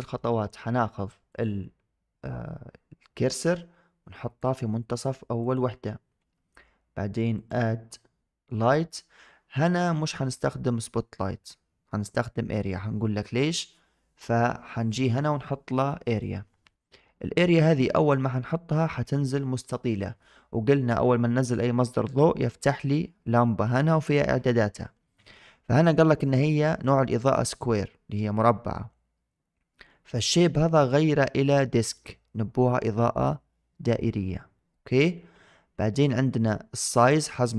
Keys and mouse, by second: 1.2 click, 4.3 click, 5.3 click, 7.3-16.1 drag, 18.0 shift+middle click, 30.6-32.0 drag.